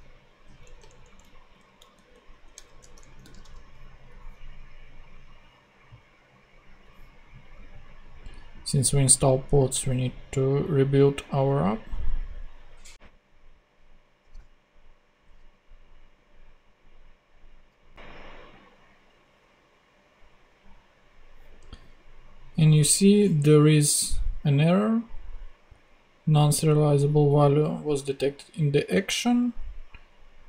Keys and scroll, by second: 0.3 super+z, 0.6 super+Down, 1.5 shift+Up, 2.7 alt+shift+Tab, 2.9 Down, 3.1 super+x, 14.3 ;, 14.4 super+Tab.